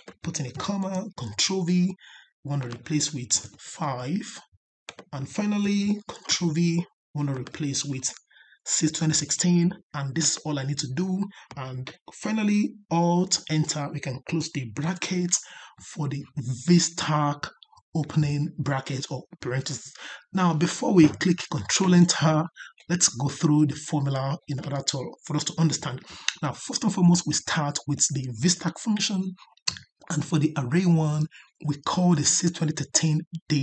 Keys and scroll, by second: 1.1 ctrl+v, 13.2 alt+Return.